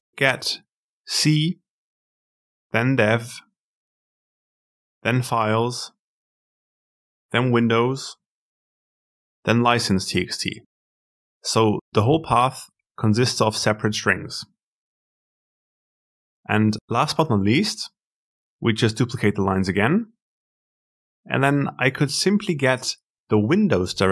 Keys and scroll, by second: 18.4 ctrl+c, 19.6 ctrl+v.